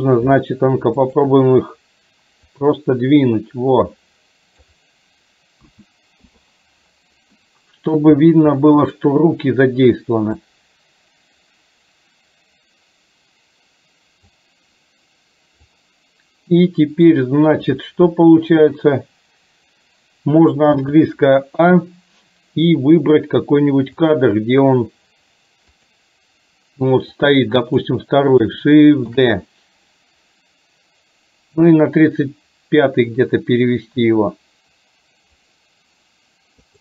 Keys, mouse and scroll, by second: 1.1 shift+click, 2.6-4.9 drag, 5.7 a, 6.4 i, 7.5-8.1 middle drag, 8.7 middle click, 10.6-14.4 drag, 15.7-17.1 drag, 21.0 a, 24.1 click, 25.9 click, 27.2 click, 29.1 shift+d.